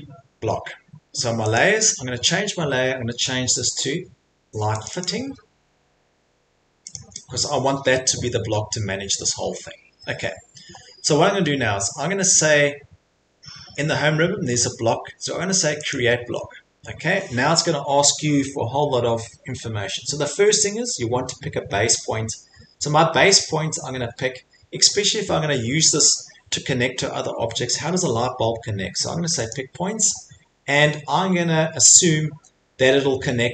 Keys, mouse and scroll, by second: 1.5 click, 4.8 click, 5.0 click, 6.9 click, 7.9 click, 7.9 middle click, 15.9-20.9 drag, 29.5 click, 30.3-30.7 scroll.